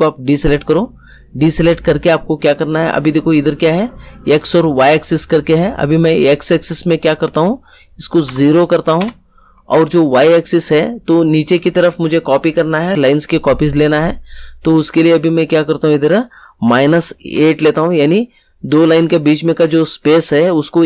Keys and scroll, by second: 8.2 0, 8.9 Return, 16.6 -, 17.3 8.